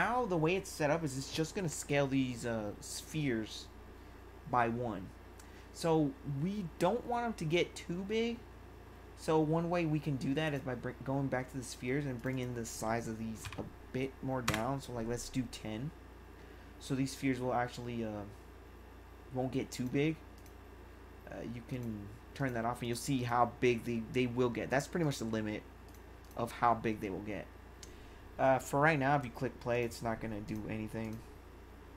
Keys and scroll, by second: 13.4 0, 14.4 Return.